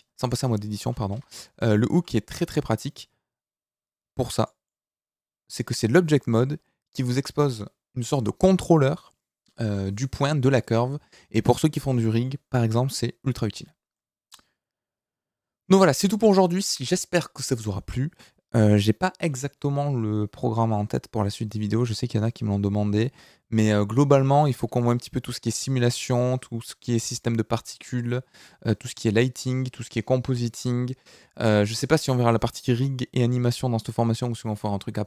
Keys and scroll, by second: 1.1 Escape, 1.9 g.